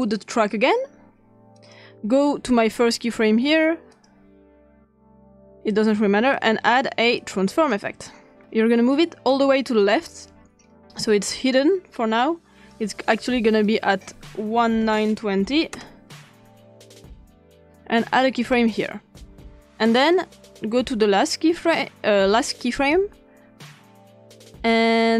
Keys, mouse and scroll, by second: 0.0 click, 1.6 click, 3.9 click, 5.1 click, 6.3 click, 7.2 click, 8.9-10.2 drag, 11.3-12.7 drag, 13.6 click, 14.6-15.4 typing, 15.1 click, 15.7 Return, 18.4 click, 20.0 click, 22.8 click.